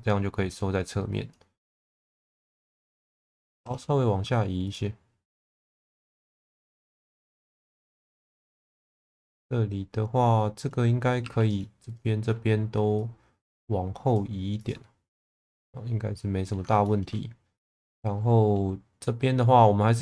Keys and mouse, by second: 0.5 click, 1.5 2, 2.2 2, 3.5 shift+v, 4.6 click, 5.4 1, 5.6 click, 6.3 click, 8.3 shift+middle click, 8.8 shift+middle click, 11.2 2, 11.4 click, 13.0 click, 15.2-16.5 middle drag, 16.8 shift+middle click, 17.5-18.5 middle drag.